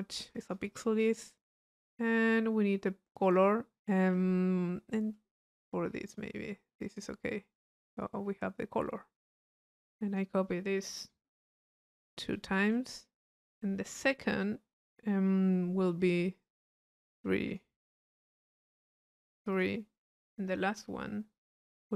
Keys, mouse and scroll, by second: 0.4 click, 3.1-4.3 drag, 4.7 middle click, 6.0 click, 7.4-8.5 middle drag, 9.7 click, 10.9 click, 12.1 c, 12.1 click, 13.4 click, 16.4-17.9 drag, 18.5 click, 19.5 click, 20.0 click.